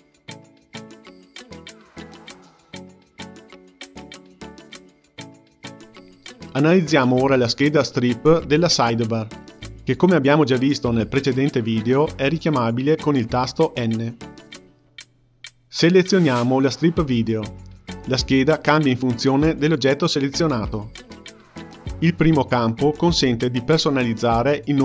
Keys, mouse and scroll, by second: 0.5 click, 1.0-4.1 drag, 13.2 n, 18.1 click, 20.5 click, 22.1 click.